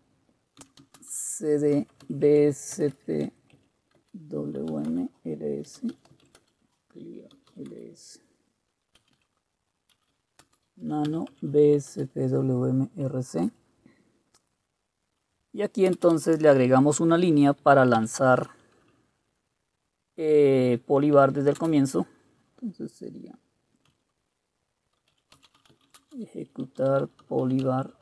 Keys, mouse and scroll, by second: 0.5-11.7 typing, 12.0 Return, 13.3-16.7 typing, 17.8-18.6 typing, 21.7 space, 24.0-28.0 typing.